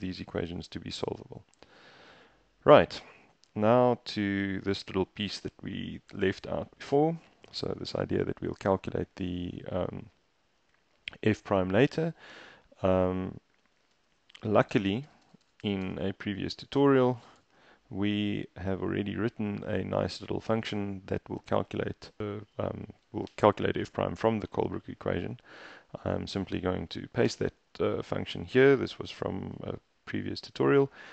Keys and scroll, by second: 1.7 super+Tab, 14.8-15.9 typing, 17.5 ctrl+k, 23.4 Escape, 24.6 a, 27.3 Return, 27.7 super+v.